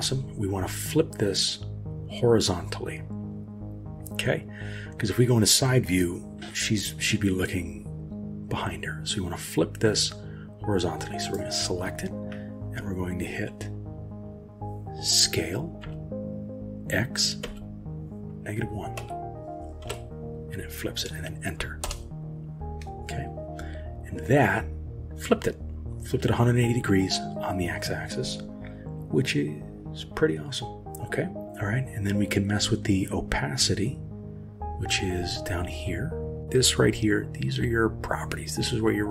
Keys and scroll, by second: 15.8 s.